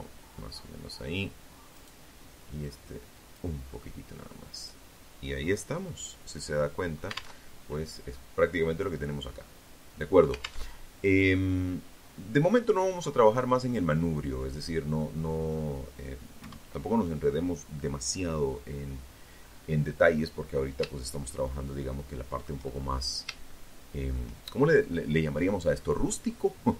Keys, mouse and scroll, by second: 0.8 click, 1.7-3.4 scroll down 1, 3.6-3.9 scroll down 1, 4.0 click, 4.0 middle click, 5.0 alt+click, 5.6 alt+Tab, 8.9 alt+Tab, 9.6-10.0 scroll down 2, 10.0-10.7 scroll up 2, 10.7-11.7 middle drag, 11.8-13.5 middle drag, 14.6 KP_1, 17.1-17.5 scroll down 2, 18.2-18.5 scroll up 2, 19.5-20.8 shift+middle drag, 20.9-21.4 shift+scroll up 3, 21.6 shift+middle click, 25.3 right click, 26.5 shift+right click.